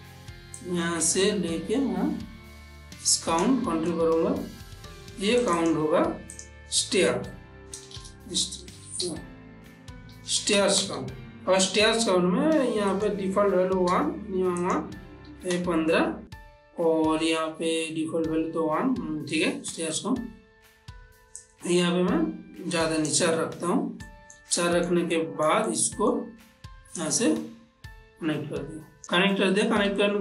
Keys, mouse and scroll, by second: 1.2-5.5 drag, 5.5 click, 8.1-9.1 typing, 10.3 s, 10.5 space, 13.0 click, 14.7 click, 21.5-24.1 drag, 24.1 ctrl+middle click, 24.7 shift+middle click, 25.2-27.1 ctrl+middle drag, 27.1-29.0 drag, 29.6 ctrl+middle click.